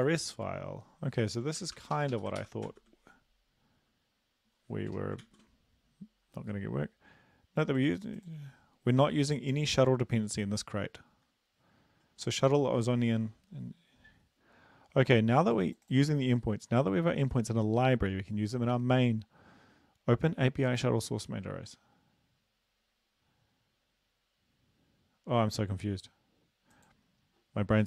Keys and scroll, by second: 1.6 Return, 1.7 Return, 2.0 Up, 2.1 Up, 2.4 ctrl+v, 2.7 ctrl+s, 4.9 BackSpace, 5.3 ctrl+s.